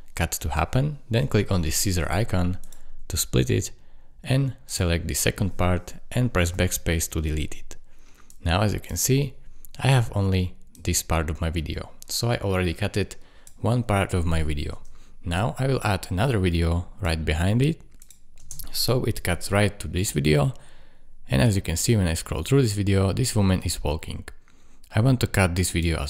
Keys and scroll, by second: 6.5 BackSpace, 9.1 space, 14.7 space, 18.4 space.